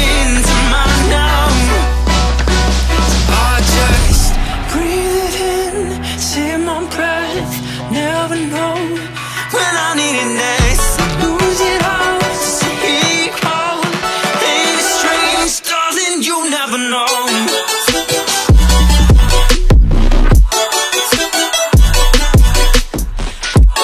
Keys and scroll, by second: 10.9 scroll, 11.6-12.2 scroll, 12.5-12.9 scroll, 17.4-17.7 scroll, 18.6 scroll, 20.6-21.4 scroll, 22.3-22.7 scroll.